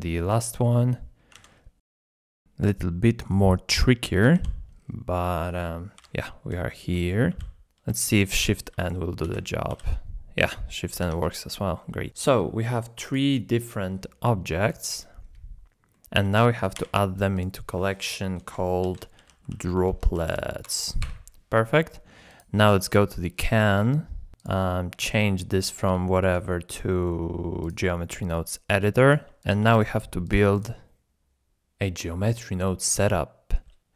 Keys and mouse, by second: 0.9 click, 1.4 alt+z, 1.7 KP_1, 2.0 shift+click, 4.3 l, 5.4 middle click, 6.0 KP_7, 6.8 alt+z, 7.0 shift+click, 7.3 g, 8.4 g, 8.8 click, 9.4 shift+n, 9.7 g, 11.0 Tab, 11.5 shift+drag, 12.0-12.4 drag, 12.5 alt+z, 14.9-15.3 shift+drag, 15.9 click, 16.7 m, 22.9 middle click, 24.4 click, 25.6-27.7 drag, 28.9 click, 29.4 shift+middle drag, 29.9 g, 30.2 click, 30.4 g.